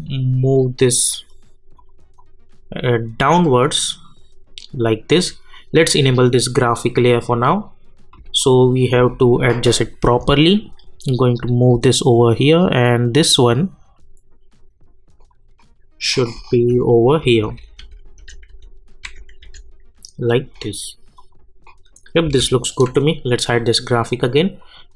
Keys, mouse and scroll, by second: 9.1-16.7 drag, 16.7 Up, 21.1 click, 22.3 j, 23.4-24.9 drag.